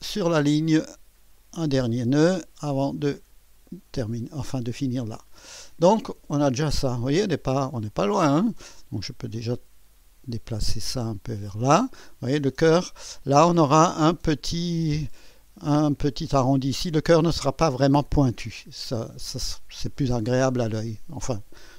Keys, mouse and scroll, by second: 1.3 click, 3.3 click, 4.8 right click, 8.0 right click, 9.5-11.7 drag.